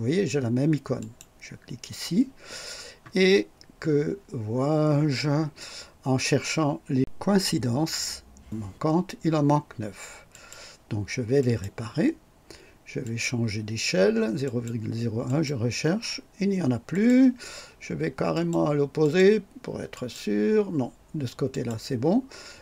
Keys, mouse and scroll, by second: 0.9 click, 8.2 click, 10.3 click, 11.3 click, 13.0 click, 14.4 click, 15.2 click, 16.9 click, 18.3 click, 19.0 click, 19.9 click, 21.5 click.